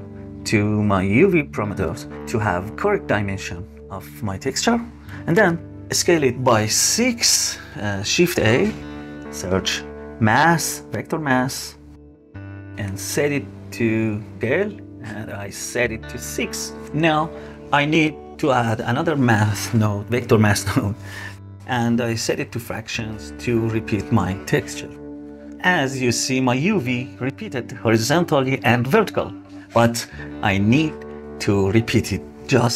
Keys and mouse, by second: 0.1-1.4 drag, 5.3 click, 6.3 click, 7.4 click, 8.2 shift+a, 10.1 BackSpace, 12.7-13.7 drag, 14.2 click, 16.5 middle click, 18.1 shift+a, 21.5-22.7 drag, 23.2 click, 23.4 click, 24.3-24.6 drag, 24.8 click.